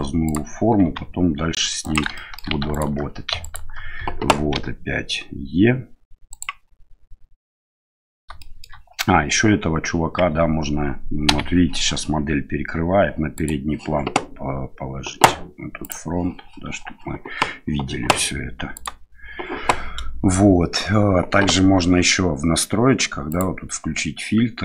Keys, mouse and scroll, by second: 0.8 s, 2.1 shift+middle click, 2.7 alt+right click, 3.4 right click, 4.5 e, 8.4 shift+middle click, 10.3 Tab, 13.3 right click, 15.8 click, 18.7 right click, 23.4-24.6 drag.